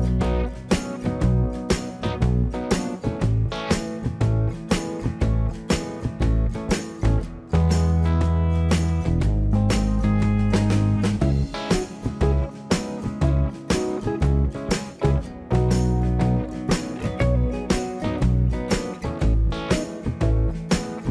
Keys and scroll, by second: 4.7 shift+Escape, 12.5-13.5 typing, 15.8 space, 17.5 Delete.